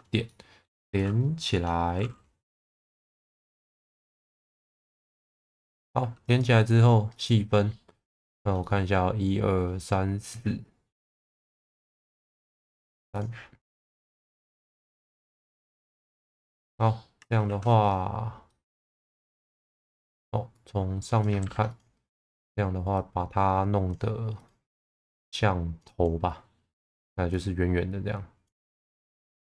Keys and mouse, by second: 0.3 middle click, 4.4 f, 5.2 middle click, 6.0 2, 6.3 click, 8.3 shift+middle click, 8.6 middle click, 11.6 click, 13.1 click, 16.1 Tab, 16.6 1, 17.2 Tab, 17.5 1, 18.5-19.9 middle drag, 20.6 click, 21.4 ctrl+z, 21.7 click, 22.2 click, 23.1 click, 25.1 click, 26.8 click.